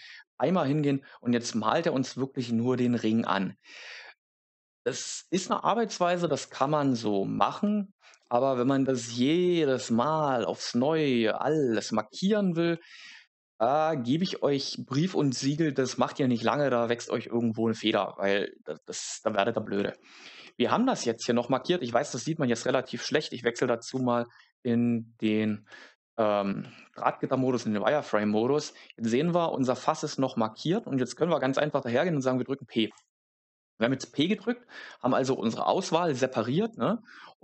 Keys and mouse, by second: 6.5 Tab, 12.6 middle click, 17.8 middle click, 22.9 z, 31.8 p.